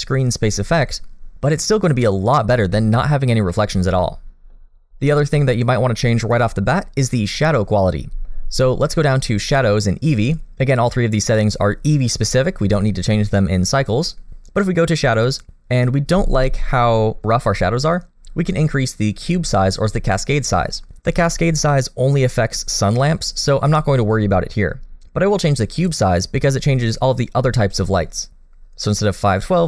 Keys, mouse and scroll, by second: 3.5 middle click, 4.7 scroll down 1, 10.2 click, 14.0-16.4 scroll down 2, 16.4 middle click, 25.8 click.